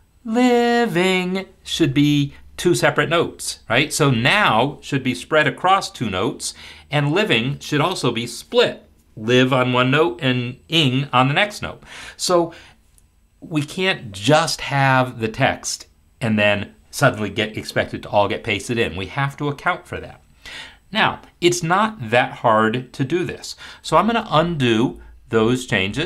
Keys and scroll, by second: 24.3 ctrl+z, 24.9 ctrl+z, 25.4 ctrl+z, 25.9 ctrl+z.